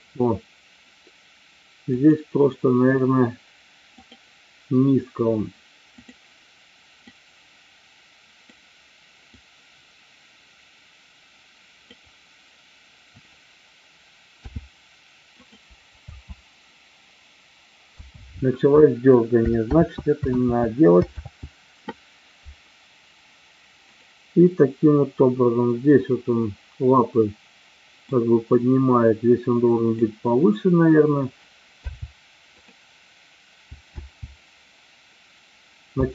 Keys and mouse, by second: 2.0 click, 6.0 click, 7.1-8.5 drag, 9.3-12.0 drag, 16.0 space, 19.3 ctrl+space, 19.7 ctrl+z, 20.4 ctrl+z, 21.2 ctrl+z, 23.8 click, 27.9-30.0 drag, 34.0 i, 34.0 space.